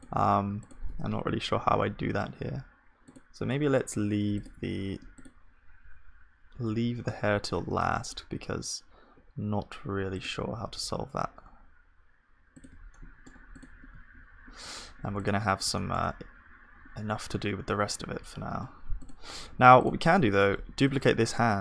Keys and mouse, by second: 0.0-2.6 drag, 0.0-1.3 middle drag, 1.3 g, 4.4 super+g, 4.4-6.8 super+drag, 4.6 ctrl+s, 6.8 KP_1, 7.3-10.1 middle drag, 7.9 z, 10.1-12.1 drag, 10.7 g, 13.6-17.2 drag, 13.6-20.1 middle drag, 13.6-17.2 right drag, 13.6 g, 13.9 z, 20.1-21.6 drag, 20.7 shift+d.